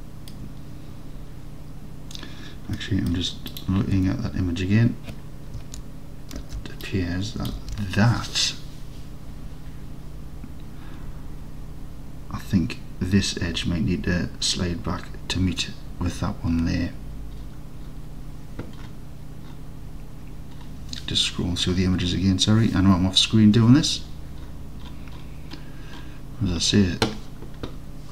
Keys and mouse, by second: 2.8 middle drag, 4.0 Tab, 6.5 alt+z, 7.1 click, 7.6 alt+z.